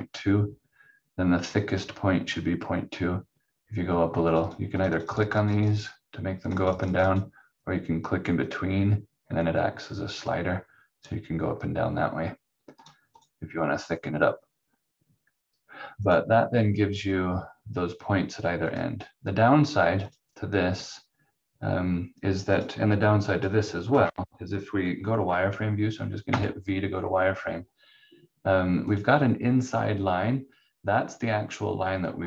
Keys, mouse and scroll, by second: 4.3 click, 26.3 v, 28.9 click.